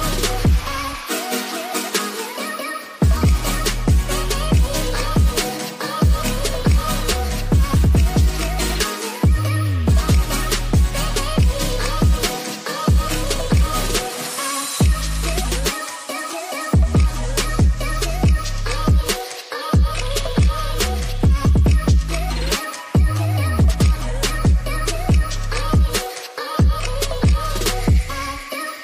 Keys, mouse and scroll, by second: 0.2 ctrl+z, 0.7 ctrl+z, 1.4 ctrl+z, 2.1-2.9 drag, 3.7 click, 6.7 drag, 7.3 click, 9.8 drag, 10.4 middle click, 11.9 click, 13.1 drag, 13.7 click, 16.2 ctrl+s, 17.3-17.7 middle drag, 19.5 drag, 20.2 middle click, 21.2 shift+a, 25.8 click, 27.7 middle click.